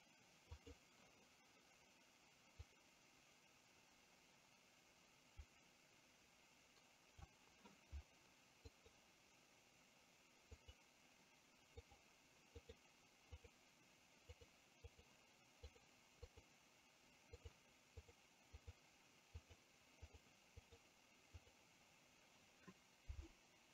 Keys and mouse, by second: 0.6 click, 2.8-7.3 drag, 8.8 click, 10.6 click, 11.8 click, 12.7 click, 13.5 click, 14.5 click, 15.0 click, 15.8 click, 16.3 click, 17.5 drag, 18.6 click, 19.5 click, 20.2 drag, 20.7 click, 21.5 click.